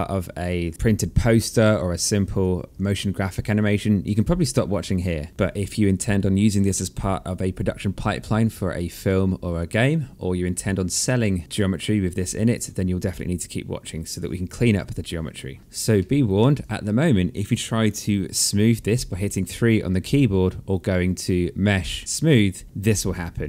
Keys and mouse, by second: 1.5 alt+click, 3.5 click, 5.3 click, 15.6 alt+click, 20.0 click, 22.7 alt+click.